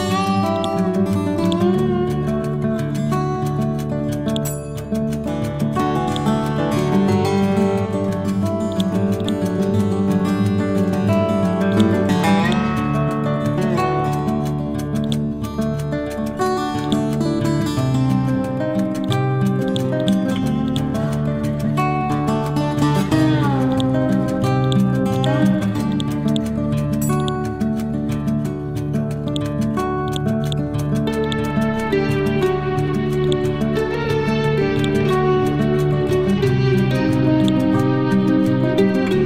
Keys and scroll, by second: 2.1 Left, 7.2 t, 7.8 ctrl+g, 9.1 c, 14.1 ctrl+u, 34.3 c, 38.0 Down.